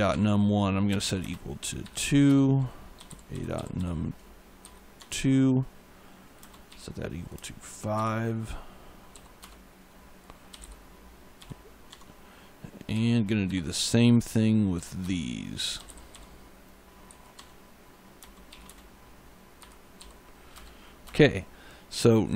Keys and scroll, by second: 0.7-4.1 typing, 4.5 Down, 4.8 Tab, 6.2 space, 6.5 =, 7.2 space, 7.8 5, 9.0 ., 9.3 Return, 10.1-10.9 typing, 11.7 Tab, 12.8 =, 13.3 2, 14.6-16.2 typing, 14.9 Return, 16.9 Down, 17.2 Tab, 18.0-19.8 typing, 20.4 Return.